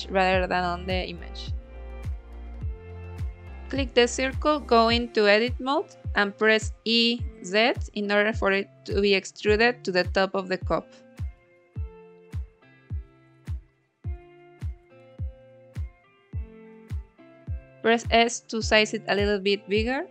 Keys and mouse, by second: 2.7 s, 4.2 click, 4.6 g, 4.7 x, 5.5 click, 6.1 g, 6.2 x, 6.8 click, 9.3 Tab, 10.6 1, 11.8 e, 12.8 z, 16.5 click, 17.2 s, 19.6 click.